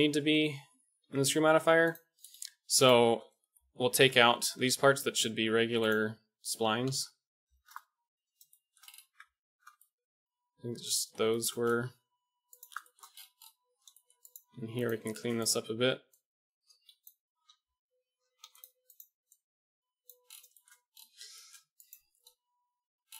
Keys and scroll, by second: 1.0 Tab, 3.9 ctrl+l, 4.4 p, 6.9 ctrl+l, 7.4 p, 9.0 Tab, 11.8 Tab, 14.4 x, 17.5 typing, 19.8 KP_1, 20.0 e, 21.1 KP_1.